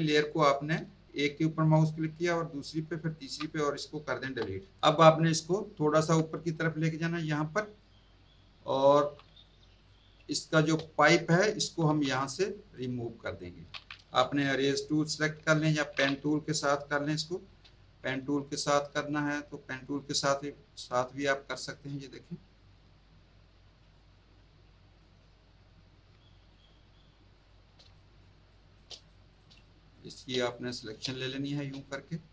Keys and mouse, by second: 2.3 shift+click, 3.0 shift+click, 4.2 Delete, 4.8 click, 5.6 click, 8.9 z, 9.3 click, 9.7 click, 10.1 space, 10.3 click, 11.8 z, 12.4 click, 17.4 p, 21.2 click, 22.5 click, 24.8 click, 26.5 alt+click, 27.3 click, 27.8 space, 27.9 click, 29.3 click, 29.5 space, 29.6 click, 30.3 click, 31.0 space, 31.1 click.